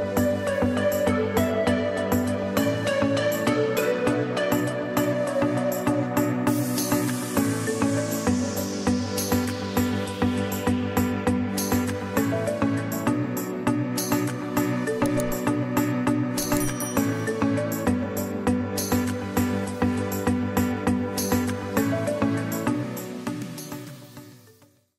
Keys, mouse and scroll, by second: 3.1 click, 5.2 scroll down 1, 7.3 click, 7.8 space, 12.5 click, 12.9 space, 17.4 click.